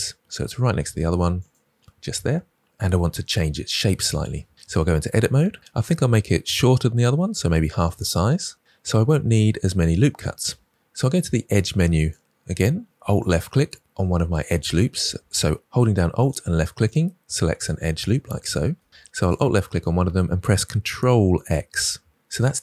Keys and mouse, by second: 1.3 click, 4.6 Tab, 12.0 click, 16.1 alt+click, 17.5 alt+click, 18.3 alt+click, 22.1 ctrl+x.